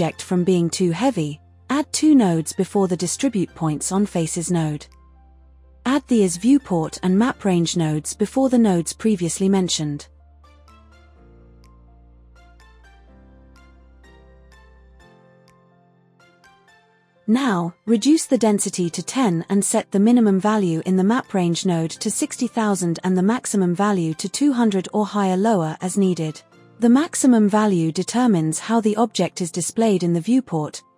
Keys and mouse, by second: 0.3 shift+a, 7.9 drag, 8.7 shift+a, 14.9-15.6 drag, 16.2 click, 17.4 KP_0, 17.6 KP_0, 19.2-20.9 middle drag, 23.4 KP_0, 25.6 KP_0.